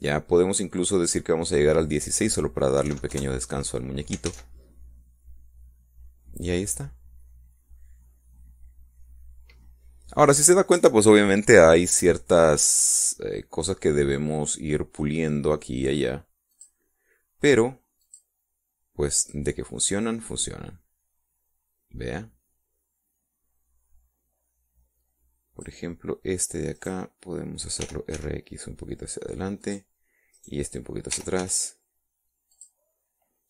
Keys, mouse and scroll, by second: 2.6 click, 4.0 KP_1, 4.1 KP_6, 4.3 KP_Enter, 5.5 alt+a, 11.5 Escape, 13.8-16.1 middle drag, 16.1-17.7 scroll up 3, 17.7 click, 19.2 click, 20.4 click, 21.1-27.1 drag, 28.0 right click, 29.0 r, 29.4 x, 30.9 click, 31.5 right click, 32.3 r, 32.6 x.